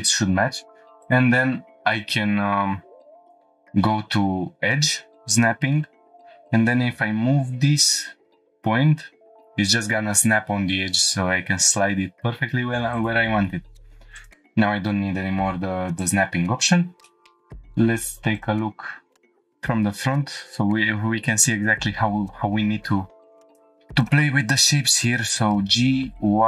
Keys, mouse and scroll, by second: 5.0 click, 5.4-5.8 shift+middle drag, 6.3-6.6 scroll up 1, 6.9 g, 12.9 click, 14.2 click, 16.1 click, 16.6 scroll down 2, 17.0 shift+middle drag, 18.3 click, 19.2 shift+middle click, 19.3 scroll up 2, 20.2 scroll up 1, 23.5 ctrl+r, 24.0 right click, 25.1 g, 25.5 y.